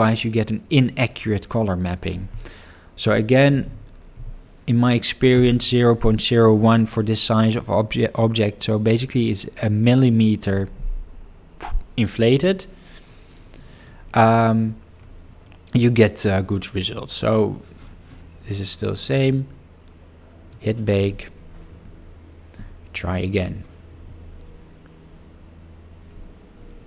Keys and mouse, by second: 3.6 0, 15.4-16.1 middle drag.